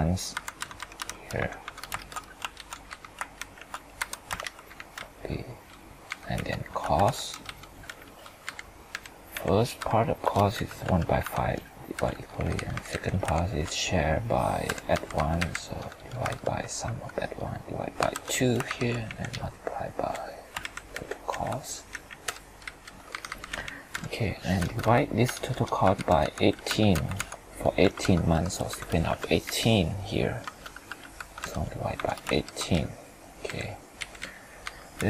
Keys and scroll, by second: 0.3 F2, 0.6 F4, 2.0 ctrl+Return, 2.5 ctrl+shift+Down, 3.4 ctrl+shift+Right, 4.0 F2, 4.4 ctrl+Return, 13.3 ctrl+shift+Up, 18.7 ctrl+Page_Up, 20.6 ctrl+Right, 32.4 ctrl+Return.